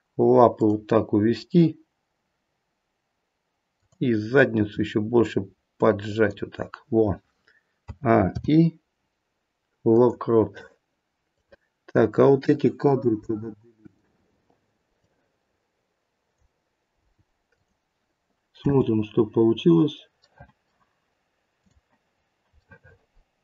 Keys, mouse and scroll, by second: 3.7 click, 4.6 r, 7.7 a, 8.2 i, 11.3 click, 13.2 Delete, 14.9 click, 16.9 Delete, 18.5 space, 19.5-19.9 scroll up 5, 20.4 middle click, 21.5 click, 22.1-23.4 scroll down 3, 22.6 middle click.